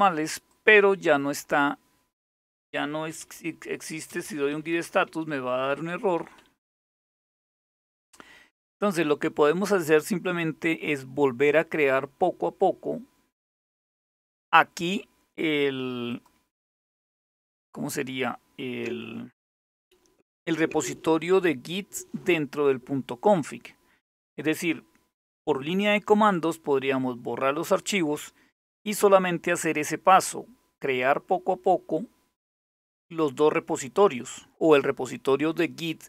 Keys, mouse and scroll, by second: 0.1 click, 2.5-6.7 typing, 6.9 Return, 15.8 click.